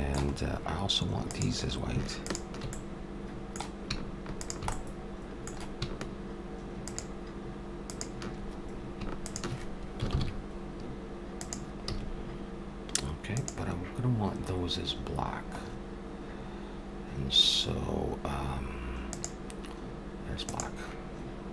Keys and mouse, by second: 1.3-3.9 drag, 2.7-3.9 middle drag, 4.4-6.1 drag, 6.1 middle click, 6.8-11.1 drag, 10.1 ctrl+l, 11.9 a, 13.3-15.1 drag, 15.6-19.0 middle drag, 19.1-21.0 drag.